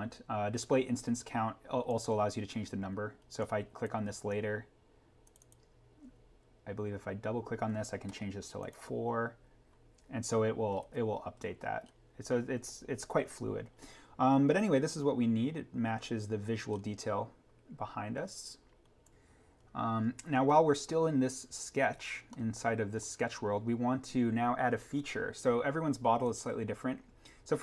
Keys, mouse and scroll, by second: 1.8 click, 8.6 click, 10.7 ctrl+z, 11.8-13.7 scroll up 1, 15.6 scroll down 1, 16.6-18.5 scroll up 1, 19.0 click, 19.7-20.6 scroll down 1, 22.0-22.4 scroll up 1, 22.6-23.3 scroll, 25.6 scroll up 1, 26.3 click.